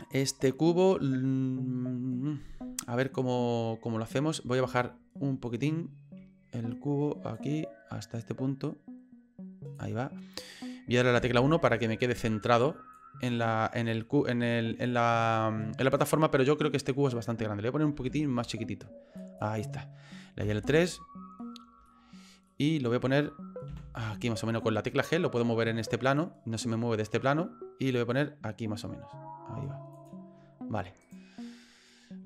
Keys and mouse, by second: 7.3-9.7 drag, 11.2 KP_1, 12.9-14.8 drag, 15.9-17.0 middle drag, 18.0 s, 20.4 KP_3, 21.9 shift+middle click, 22.6 shift+middle click, 23.7 g, 31.0 right click.